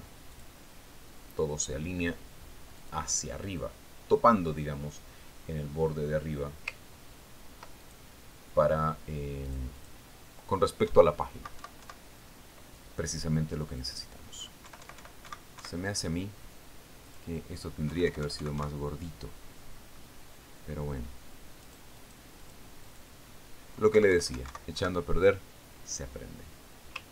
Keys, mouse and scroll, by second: 1.8 click, 4.2 click, 8.4-9.3 ctrl+scroll up 3, 9.3 ctrl+click, 9.6-11.0 scroll up 2, 11.0 click, 11.1-12.4 scroll up 4, 11.3 click, 12.4 Right, 12.4-13.9 scroll up 1, 13.9 scroll up 1, 15.3 click, 16.1 Right, 18.5 click, 19.3 Right, 21.4 click, 22.0-23.1 middle drag, 23.1 right click, 23.5 click, 23.9 click, 24.3 click, 25.4 Right.